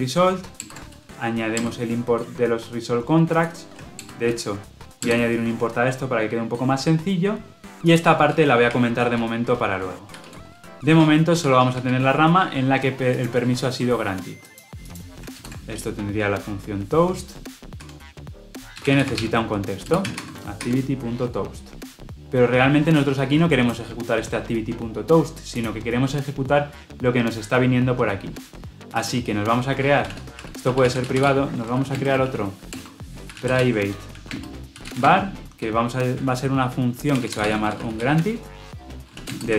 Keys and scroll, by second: 2.1 alt+Return, 10.7 ctrl+z, 15.3 alt+Return, 19.8 Return, 20.5 Escape.